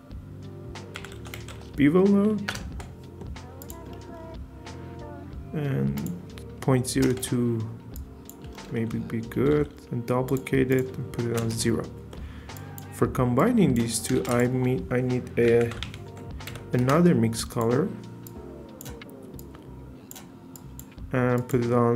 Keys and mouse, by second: 3.6 click, 3.7 typing, 6.1 click, 7.9 click, 9.5 shift+d, 10.7 click, 13.4 click, 13.9 click, 14.2 shift+a, 17.6 click, 17.6 typing, 18.2 drag, 19.4 drag, 20.5 click, 21.4-21.9 drag.